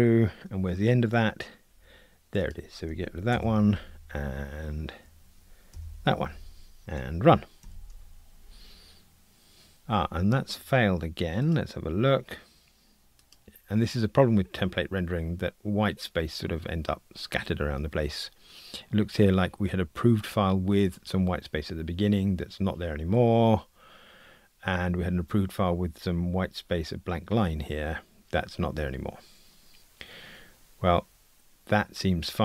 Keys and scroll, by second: 3.3 super+BackSpace, 7.6 super+BackSpace.